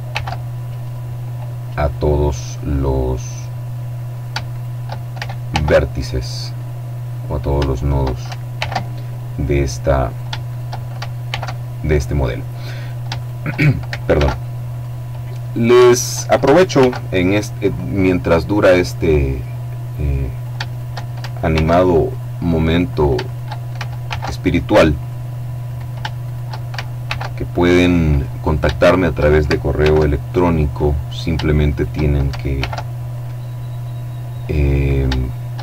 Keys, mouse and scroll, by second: 0.3 click, 1.0-2.1 middle drag, 2.1-3.2 drag, 3.6 shift+right click, 5.0 alt+m, 6.0 click, 6.8 shift+right click, 8.0 alt+m, 8.6 alt+click, 9.5 shift+right click, 10.7 alt+m, 11.5 click, 12.2 shift+right click, 13.6 alt+m, 14.2 click, 14.9 shift+right click, 16.2 alt+m, 17.1 click, 17.7-19.3 middle drag, 19.8 shift+right click, 21.0 alt+m, 21.6 alt+click, 22.4 shift+right click, 23.5 alt+m, 24.4 click, 25.1 right click, 26.5 alt+m, 27.1 click, 27.8 shift+right click, 29.2 alt+m, 29.7 alt+click, 30.5 shift+right click, 32.0 alt+m, 32.6 alt+click, 34.3 shift+right click.